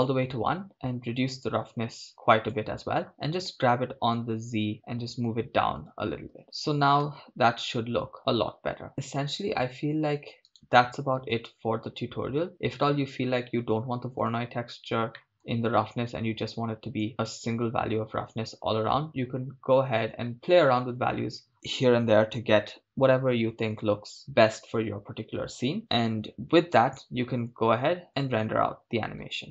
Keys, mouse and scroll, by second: 3.5 g, 4.5 z, 5.9-6.4 drag, 6.4 shift+space, 8.0 shift+space, 10.5 right click, 12.7-14.3 drag, 15.3 middle click, 16.5-17.1 drag, 28.1-29.5 drag.